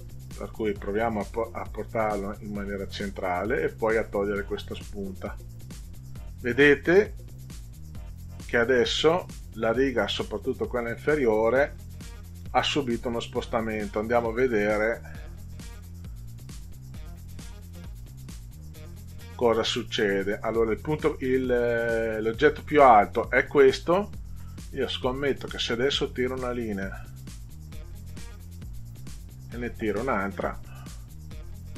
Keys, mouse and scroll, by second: 0.8 click, 2.0 click, 3.7 click, 5.3 click, 12.4 ctrl+z, 16.6 click, 25.3-28.2 drag, 29.8-31.7 drag.